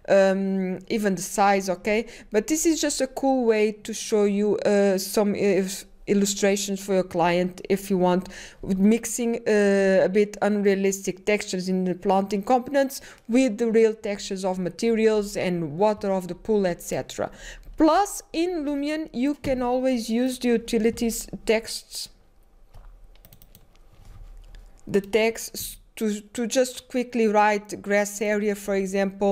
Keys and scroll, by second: 0.0-0.6 typing, 2.7-3.4 typing, 15.4-16.4 typing, 17.6-18.4 typing, 19.5-20.2 typing, 23.3-24.0 typing.